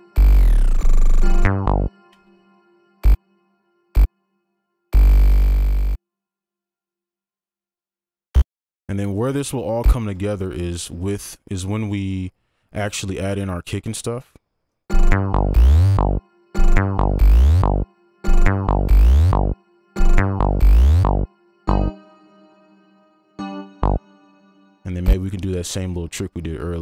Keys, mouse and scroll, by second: 2.1 space, 8.7-10.0 scroll up 1, 10.0 click, 10.3 ctrl+Up, 14.9 space, 16.3 space, 18.0 space, 18.2 space, 19.9 space, 23.9 space.